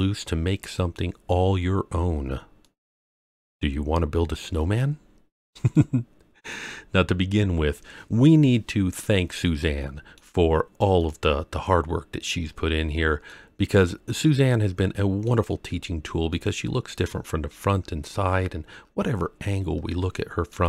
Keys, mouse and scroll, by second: 2.3-2.6 scroll up 2, 2.6-3.1 middle drag, 5.2-5.7 scroll down 3, 5.7-6.5 middle drag, 6.5 scroll up 1, 9.0-10.1 middle drag, 10.4-10.8 scroll up 2, 10.9-13.2 middle drag, 13.8 scroll down 1, 14.4-15.2 middle drag, 15.5 scroll up 1, 16.3-20.5 middle drag.